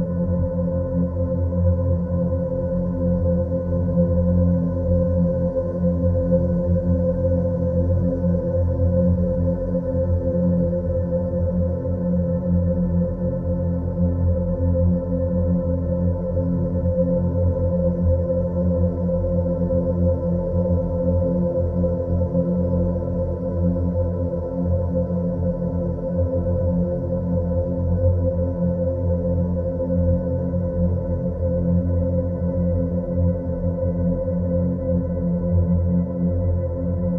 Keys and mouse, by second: 3.6 e, 6.2 2, 6.6 click, 7.7 click, 8.9-10.5 drag, 10.9 click, 12.6 3, 13.0-13.4 middle drag, 14.1 click, 15.7 ctrl+b, 31.5 click, 33.5 click, 34.5 Tab, 36.4 Tab, 36.9 a.